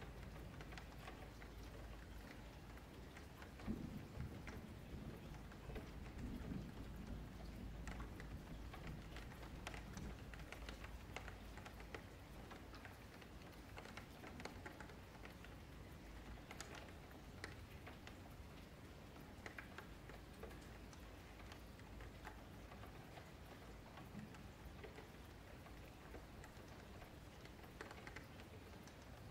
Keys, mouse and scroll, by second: 0.1-0.4 scroll up 1, 0.4-0.8 middle drag, 0.8-1.4 scroll down 4, 1.4 click, 2.7-3.4 drag, 3.4-4.5 scroll up 3, 4.5 click, 4.8-5.4 scroll down 3, 5.4 click, 5.9 click, 6.4 click, 6.9 click, 7.4 click, 7.7 click, 7.9 click, 8.0 click, 8.2 click, 8.5 click, 9.4 click, 10.9 Delete, 11.2 middle click, 11.5 click, 11.8 Tab, 12.1 2, 12.5 alt+click, 12.7-13.2 scroll up 2, 13.2 middle click, 13.5-14.1 scroll up 2, 13.7 shift+middle click, 14.1 1, 14.6 click, 14.9 middle click, 15.8-16.6 scroll up 3, 16.6 shift+middle click, 17.0 click, 18.9 click, 19.3 shift+click, 19.6 alt+shift+a, 20.3 click, 20.6 shift+click, 20.9 alt+shift+a, 21.6-22.7 middle drag, 22.7 click, 23.2 scroll down 2, 23.4 middle click, 23.7 ctrl+z, 24.0 ctrl+z, 24.4 click, 24.8-25.9 middle drag, 25.9 click, 26.2 shift+click, 26.5 alt+shift+a, 27.4 click, 27.7 shift+click, 28.0 alt+shift+a, 28.5-29.3 shift+middle drag.